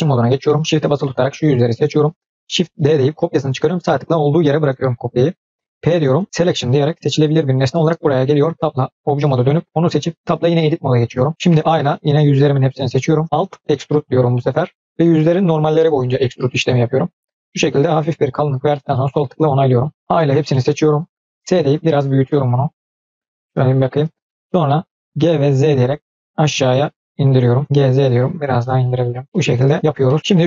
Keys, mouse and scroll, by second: 0.8 shift+click, 1.2 shift+click, 1.7 middle click, 2.7 shift+d, 5.9 p, 8.5 Tab, 9.1-9.5 drag, 10.1 Tab, 11.6 a, 13.6 alt+e, 18.7-19.9 middle drag, 19.9 a, 20.4 middle click, 21.3 s, 23.1 middle click, 24.0 scroll up 2, 24.2-24.8 middle drag, 25.2 g, 27.6 middle click, 27.6 g, 29.2 middle click, 29.8 scroll down 2, 30.0 middle click, 30.3 click.